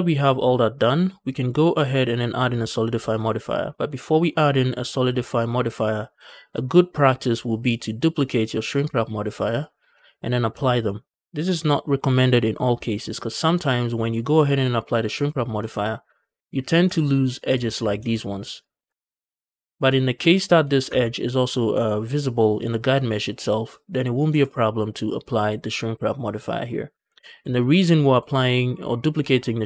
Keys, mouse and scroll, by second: 0.3-0.6 middle drag, 1.0 scroll down 1, 1.2 middle click, 1.6 middle click, 1.9-2.2 scroll up 2, 2.2 shift+middle drag, 3.1 middle drag, 3.5 shift+middle drag, 4.1 middle click, 5.0 shift+middle drag, 5.6 middle click, 6.1 shift+middle click, 8.5-9.5 drag, 9.8-10.3 scroll down 2, 10.3-10.7 scroll down 1, 15.1-15.4 shift+middle drag, 15.6 middle drag, 15.8 scroll up 1, 16.1-16.5 shift+middle drag, 16.7 Tab, 16.8-17.4 scroll up 1, 17.6 alt+click, 18.0 alt+shift+click, 18.4 alt+shift+click, 19.0 shift+middle click, 20.1 Tab, 20.8 Tab, 24.2 Tab, 26.9 scroll down 1, 27.3 shift+middle drag, 27.5 middle drag, 28.0 shift+middle drag.